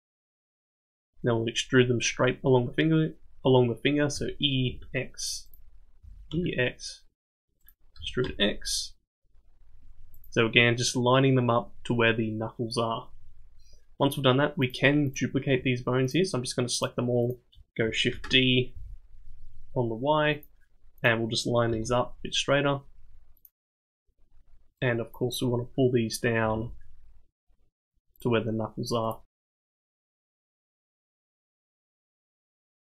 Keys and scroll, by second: 4.1 e, 6.0 e, 8.0 e, 18.1 shift+d, 21.7 g, 26.4 g, 29.4 g, 31.7 g.